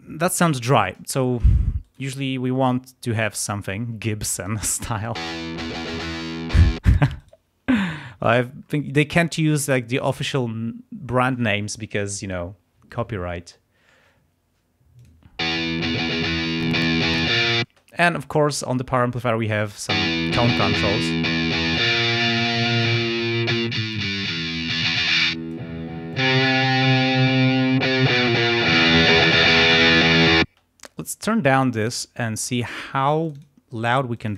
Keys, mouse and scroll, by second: 1.8 right click, 4.4 click, 5.1 space, 6.7 space, 7.2 right click, 8.6-9.0 scroll up 2, 15.0 click, 15.4 space, 16.5-17.6 drag, 17.6 space, 19.9 space, 20.1-21.9 drag, 22.5 click, 23.6 click, 24.6-25.7 drag, 26.1 click, 28.7-29.9 drag, 30.4 space, 31.6-32.6 drag, 33.2 click, 34.2 click.